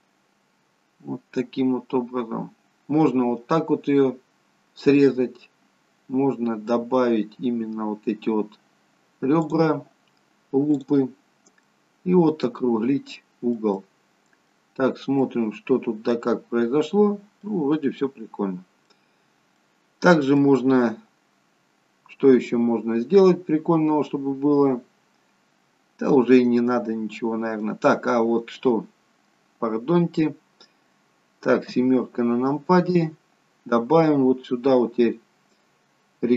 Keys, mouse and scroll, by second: 10.9 click, 11.2 scroll down 2, 11.5 middle click, 13.7 middle click, 14.7-15.7 scroll up 2, 15.7 middle click, 15.7-16.2 scroll up 1, 17.5 scroll down 3, 19.7-20.3 scroll down 1, 20.3 middle click, 20.3-21.0 scroll down 1, 28.0-31.0 scroll down 1, 31.6 KP_7.